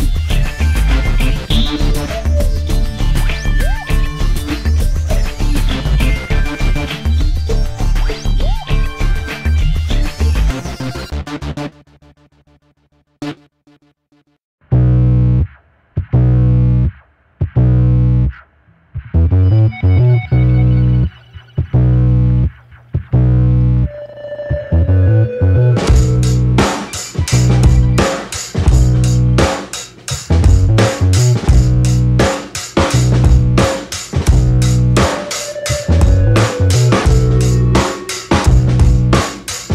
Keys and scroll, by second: 2.5 c, 4.2 Delete, 11.2 space, 11.7 space, 17.6 space, 18.3 space, 23.1 space, 30.6 ctrl+z, 35.6 ctrl+7, 37.4 space, 38.4 space, 39.0 space.